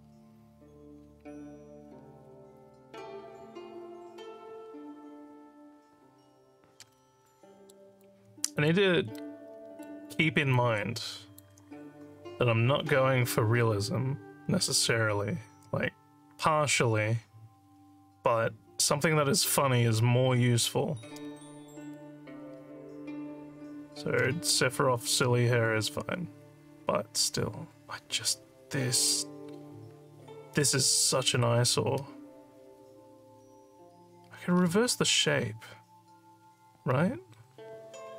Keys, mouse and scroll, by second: 7.3 alt+middle click, 8.0 alt+click, 9.1 alt+middle click, 10.5 alt+click, 21.2 scroll up 2, 34.6 scroll up 2.